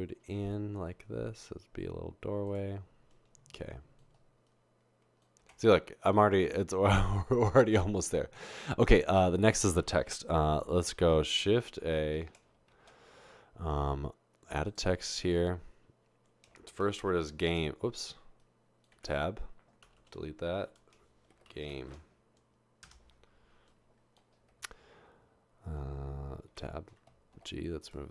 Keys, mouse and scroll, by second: 5.6 Tab, 12.9 typing, 16.7-17.4 typing, 18.9 Tab, 19.9-24.2 typing, 26.7 Tab, 27.3 typing.